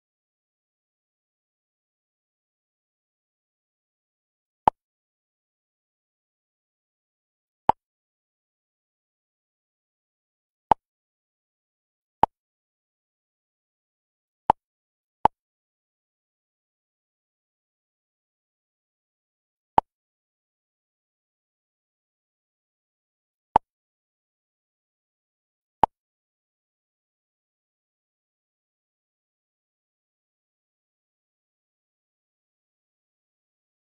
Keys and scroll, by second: 0.1 Down.